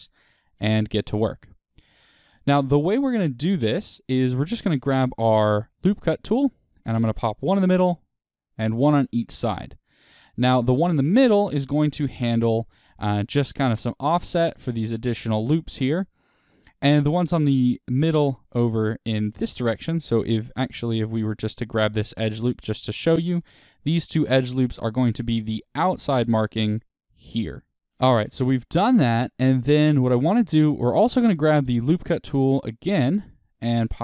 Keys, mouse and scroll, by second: 1.9-2.3 scroll down 2, 3.4-4.4 scroll up 2, 5.5 click, 7.3 click, 8.2-9.9 drag, 10.7-11.6 scroll down 1, 11.6-20.5 middle drag, 20.5 w, 21.4 alt+click, 21.8-22.9 middle drag, 22.9 alt+shift+click, 23.2-23.9 scroll up 1, 24.7-25.1 scroll down 1, 25.1-26.3 shift+middle drag, 26.3-27.8 drag, 27.4 d, 27.8-32.5 shift+middle drag, 32.5 click.